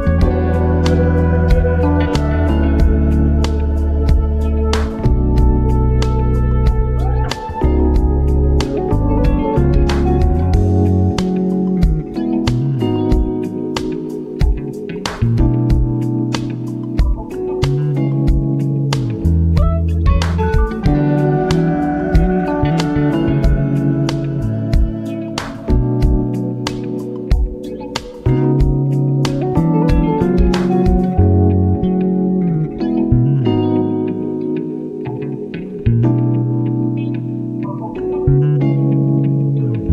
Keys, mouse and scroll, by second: 2.8 shift+Up, 6.8 click, 6.9 ctrl+alt+scroll down 1, 7.7 scroll down 2, 8.6-16.3 drag, 17.6 ctrl+t, 18.6-21.0 alt+drag, 21.0 Return, 21.6 typing, 23.5 click, 25.9 Down, 27.0 Down, 35.8 Down.